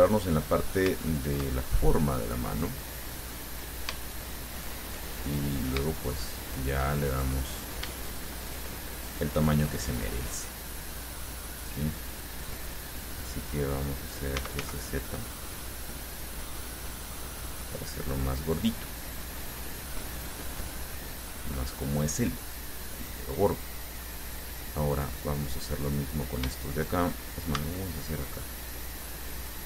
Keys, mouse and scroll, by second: 0.8-1.1 scroll up 1, 1.2-2.6 shift+drag, 2.7-3.7 drag, 4.2 shift+right click, 4.8 shift+right click, 5.4 shift+middle click, 6.3 shift+right click, 6.8 shift+right click, 7.1 shift+middle click, 8.7 shift+right click, 9.3 shift+right click, 9.7 shift+middle click, 9.7-12.3 shift+drag, 14.6 s, 14.8 z, 17.7 click, 18.8-22.3 drag, 22.4-23.5 middle drag, 24.2 middle click, 26.0 right click, 27.8 c, 28.5-29.6 drag.